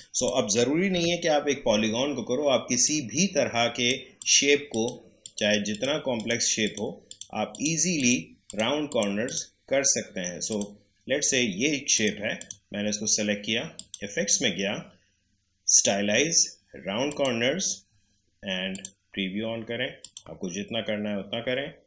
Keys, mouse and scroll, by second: 0.9 Delete, 2.8 click, 17.0 click, 17.3 click, 20.5-21.6 scroll up 1.